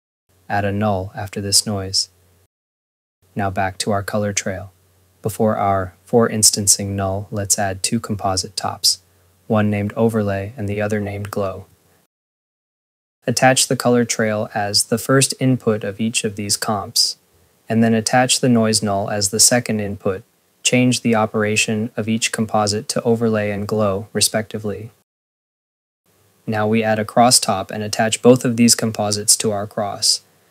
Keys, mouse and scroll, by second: 0.0 scroll, 0.1 click, 0.6 scroll, 0.7 right click, 1.7 click, 3.6 ctrl+s, 4.0 scroll, 4.9 Tab, 5.0-5.9 typing, 6.3 click, 8.5 click, 8.7-9.8 typing, 10.4 click, 11.9-12.8 typing, 13.2 click, 13.9 scroll, 14.4 click, 14.8 scroll, 15.9 click, 17.0 click, 18.0 click, 18.8 click, 19.9 click, 20.5 click, 20.9 scroll, 21.4 ctrl+s, 22.2 click, 22.4 space, 22.6 click, 26.8 ctrl+s, 27.4 Tab, 27.7-28.8 typing, 29.0 click, 30.2 click.